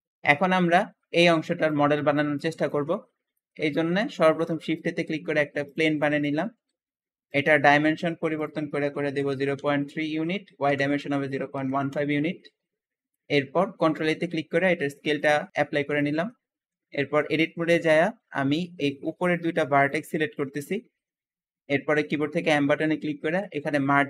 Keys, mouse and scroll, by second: 0.4-2.8 scroll down 1, 2.8 Escape, 2.8-3.2 scroll down 2, 3.2 shift+middle click, 4.1 scroll up 2, 4.4 shift+a, 4.4 shift+a, 5.9 shift+middle click, 6.6 w, 7.2 click, 8.3-11.5 drag, 8.9 KP_0, 9.2 KP_Decimal, 9.3 KP_Decimal, 9.5 KP_3, 9.9 Tab, 10.6-11.6 typing, 11.8 Return, 11.9 Return, 12.7 scroll up 3, 13.0 shift+middle click, 13.4 scroll up 4, 13.8 ctrl+a, 13.9 ctrl+a, 15.9 shift+middle click, 16.3-17.4 scroll up 2, 17.4 Tab, 19.1 click, 20.4 shift+click, 22.3 m.